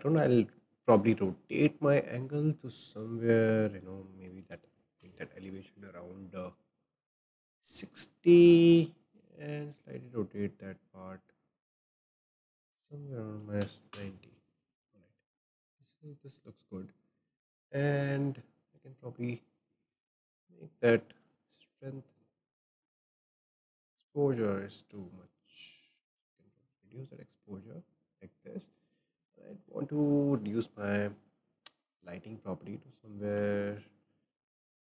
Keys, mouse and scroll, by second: 0.6-3.7 shift+middle drag, 3.7-6.9 drag, 8.6-11.7 drag, 12.5-15.6 drag, 16.3 click, 17.9 click, 19.7-21.7 drag, 22.2 click, 24.1-27.1 drag, 28.6-28.9 scroll down 3, 29.1-30.5 shift+middle drag, 30.5 click, 32.0 click, 32.9-34.9 drag.